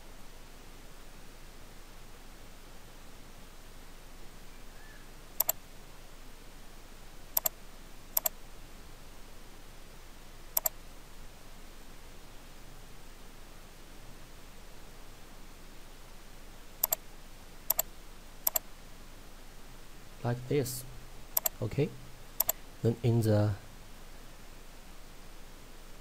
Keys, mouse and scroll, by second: 5.4 click, 16.9 click, 20.0 scroll down 1, 21.4 click.